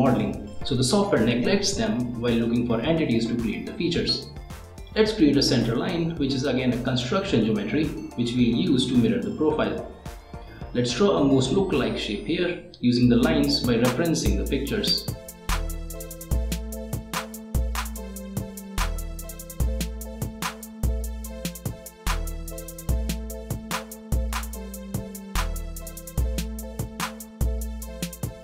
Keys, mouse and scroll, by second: 0.1 click, 1.0 click, 2.5 right click, 4.4 right click, 5.8 click, 7.3 click, 8.7-12.0 right drag, 12.6 click, 14.5 click, 15.5 click, 16.1 click, 17.2 click, 20.1 click, 23.1 click, 24.6 click, 25.5 click, 26.1 click, 26.6 click, 27.5 click.